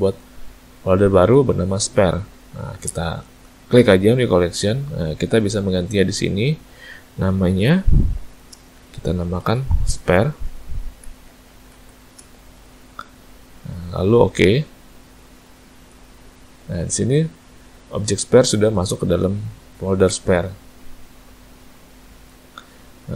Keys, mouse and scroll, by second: 20.9 click.